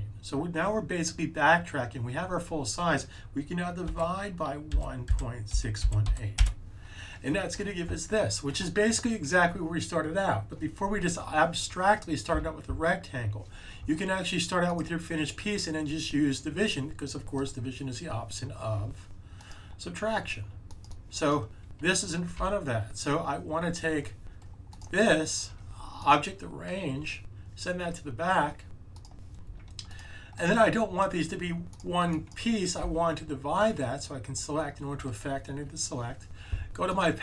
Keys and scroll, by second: 3.8-6.5 typing, 22.3 super+z, 32.7 super+z, 35.4 super+z.